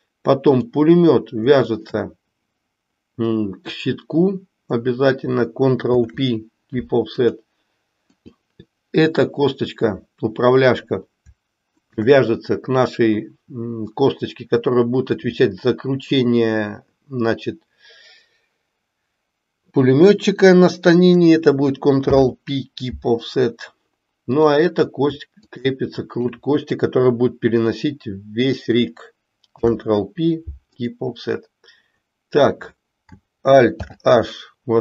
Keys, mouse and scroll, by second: 0.5 click, 1.6 shift+click, 5.8 ctrl+p, 8.2 click, 22.1 ctrl+p, 24.2 click, 25.3 shift+click, 29.5 ctrl+p, 33.7 alt+h.